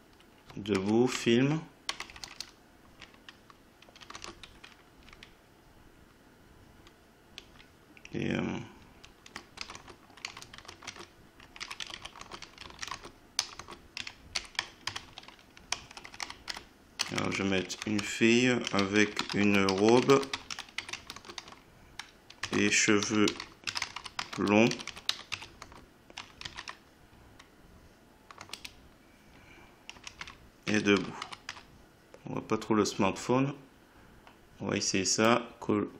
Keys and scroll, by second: 0.8 BackSpace, 1.2 ctrl+Right, 1.9 BackSpace, 4.0 e, 4.2 space, 5.0 Down, 9.6-15.7 typing, 18.4-21.4 typing, 22.5-27.1 typing, 28.4 space, 29.7-31.4 typing.